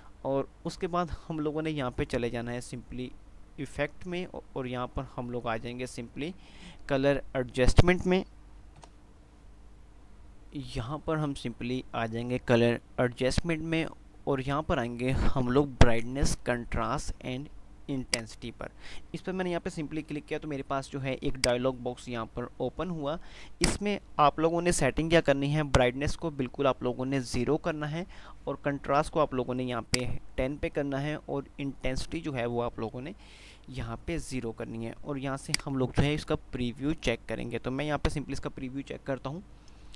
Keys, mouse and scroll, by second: 20.6 F5, 21.6-22.8 drag, 30.0-30.8 drag, 35.5 click.